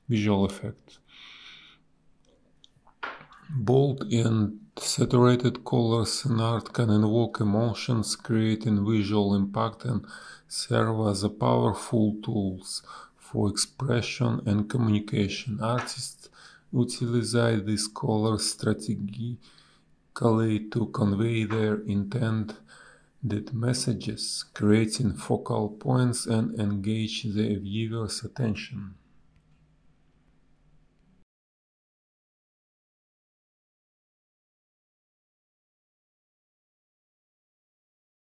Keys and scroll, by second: 9.1 space, 9.4 b, 12.4 ctrl+z, 14.7 a, 15.6 space, 19.4 space, 19.8 b, 23.3 ctrl+z, 26.5 space, 30.1 space, 31.9 z, 32.5 ctrl+z, 32.6 b, 36.0 a, 36.4 Delete, 37.9 a.